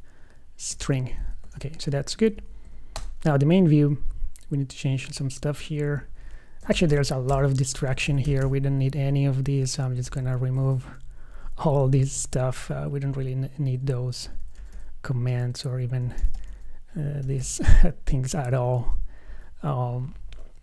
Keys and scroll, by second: 1.1 super+s, 1.9 super+w, 7.0 super+d.